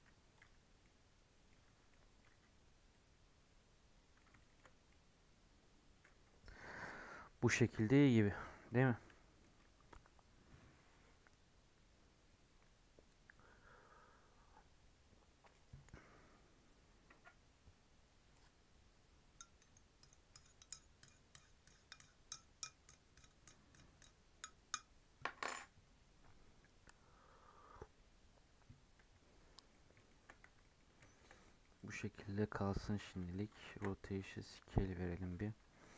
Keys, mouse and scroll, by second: 0.6 scroll down 1, 0.7 middle click, 1.6 Tab, 1.9 middle click, 2.2 Tab, 2.5-2.9 scroll up 2, 2.9-4.7 middle drag, 4.7 scroll down 2, 4.9-6.1 middle drag, 6.1-7.6 scroll up 1, 8.6 scroll down 1, 8.7-12.5 middle drag, 29.7 middle click, 30.0 shift+scroll up 1, 30.1 shift+middle click, 30.4 Tab, 30.6 middle click, 30.8 scroll up 1, 31.0-31.3 shift+middle drag, 31.3 scroll down 2, 31.4 middle drag, 31.7 scroll up 1, 31.7 middle drag, 31.9 Tab, 32.1-33.3 middle drag, 33.3 Tab, 33.6 ctrl+a.